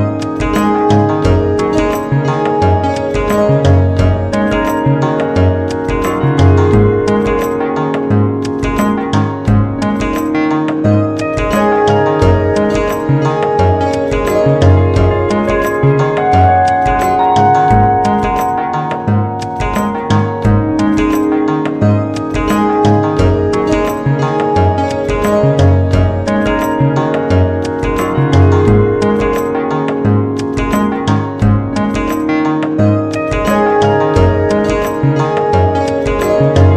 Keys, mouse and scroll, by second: 3.7-6.0 drag, 7.6 g, 11.3 s, 19.6 g, 23.5 a, 33.9 a.